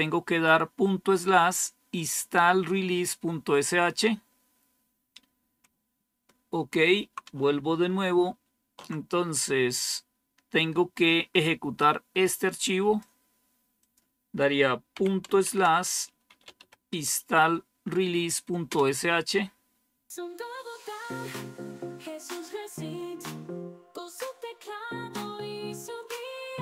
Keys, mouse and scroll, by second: 8.2 super+1, 11.7-13.0 drag, 13.9 click, 14.8-17.0 typing, 18.6 Return.